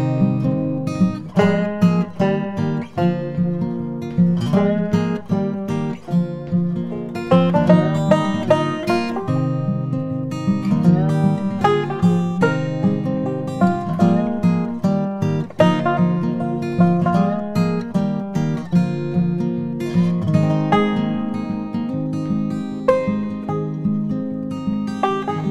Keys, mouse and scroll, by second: 0.5 shift+d, 1.6 g, 6.7 g, 8.7 KP_3, 11.9 g, 19.9 g.